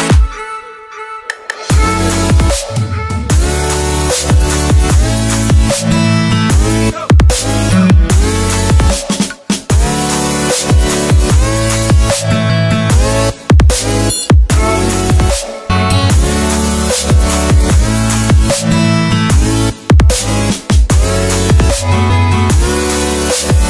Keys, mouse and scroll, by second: 0.0 click, 2.2 ctrl+j, 2.6 ctrl+t, 2.7 right click, 3.0 click, 4.9 Return, 5.1 Up, 5.5 Down, 6.0 click, 7.7 alt+Num_Lock, 7.7 alt+scroll down 1, 8.0 alt+scroll up 1, 8.7 click, 9.1 scroll up 1, 9.4 click, 11.2 ctrl+z, 11.8-12.7 scroll up 1, 12.7 click, 13.1 ctrl+c, 13.4 click, 13.7 ctrl+v, 14.2 ctrl+t, 14.4 click, 15.8 Return, 20.2 click, 20.4 Delete, 20.6-21.3 scroll up 1, 21.3-21.7 scroll down 1, 21.7 click, 23.3 alt+click.